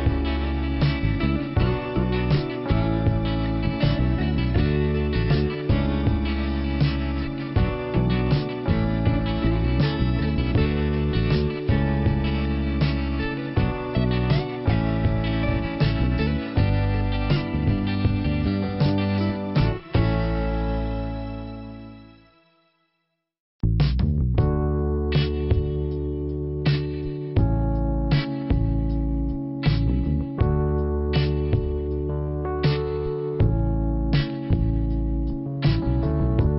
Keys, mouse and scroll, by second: 1.7 click, 2.5 scroll down 2, 2.7 scroll up 1, 5.9 middle click, 8.8 click, 9.4 middle click, 14.3 click, 14.6 double click, 20.5 click, 21.9 click, 22.1 click, 23.9 click, 25.7 click, 29.4 click, 30.2 click, 31.0 click, 31.7 click, 32.8 click, 33.0 click, 34.0 click, 35.8 click.